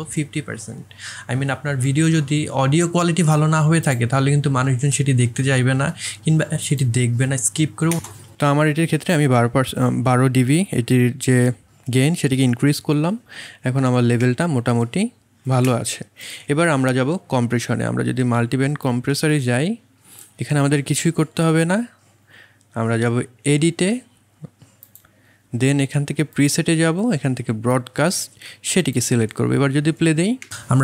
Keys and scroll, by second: 4.9 KP_1, 5.0 KP_2, 7.9 space, 14.2 space, 30.4 space.